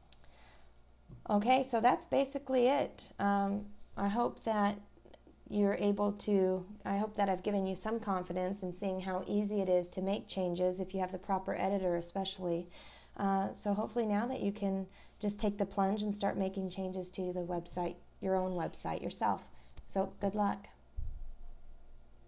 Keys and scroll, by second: 0.1 scroll up 1.